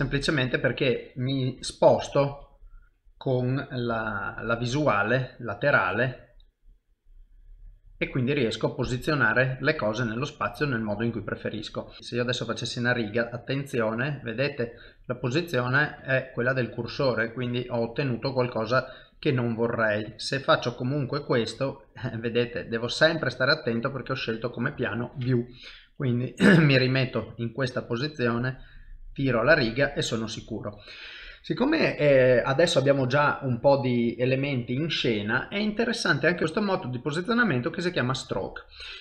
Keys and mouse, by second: 1.6 KP_7, 2.8 shift+right click, 3.9 KP_1, 4.4 KP_3, 5.6 click, 7.4 middle click, 8.6 l, 9.6 middle click, 12.0 click, 13.6 middle click, 14.0 l, 17.0 ctrl+z, 17.4 middle click, 19.1 click, 20.6 middle click, 24.8 ctrl+z, 25.2 middle click, 25.9 KP_1, 26.6 KP_3, 27.6 click, 29.0 middle click, 30.6 shift+middle click, 31.0 middle click, 33.9 middle click, 36.2 click.